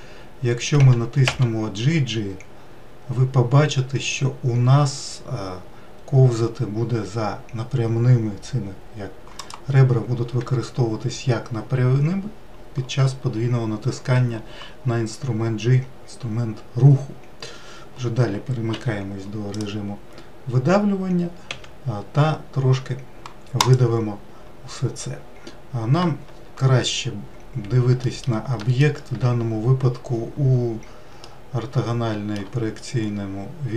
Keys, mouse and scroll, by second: 0.4 g, 18.3 3, 19.1 click, 19.7-21.1 scroll down 1, 21.1 e, 27.6 alt+middle click, 28.2 alt+middle click, 30.8-32.7 shift+middle drag, 32.7-33.7 scroll up 1.